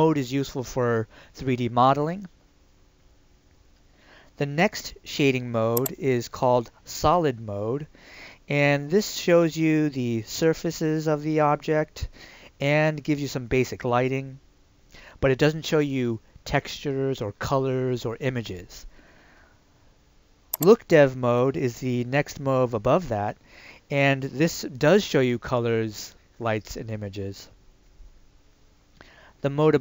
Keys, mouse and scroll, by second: 5.8 click, 20.6 click.